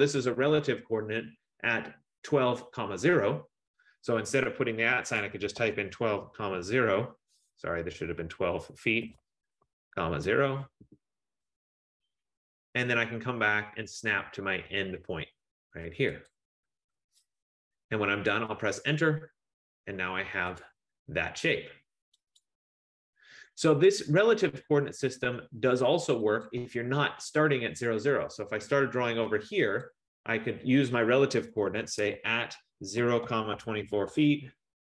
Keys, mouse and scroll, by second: 5.3-10.0 typing, 16.9 click, 18.8 Return, 20.7 click, 22.6 click, 26.7 click, 30.0 click, 32.2-34.6 typing, 34.6 Return.